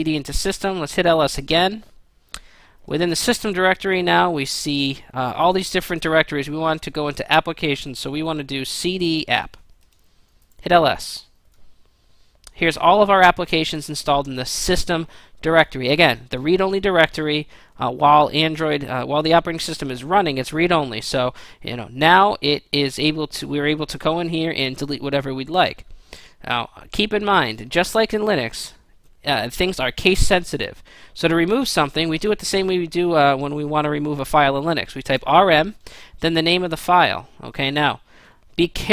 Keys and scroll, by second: 0.0-1.0 typing, 8.5-10.9 typing, 34.7-35.4 typing.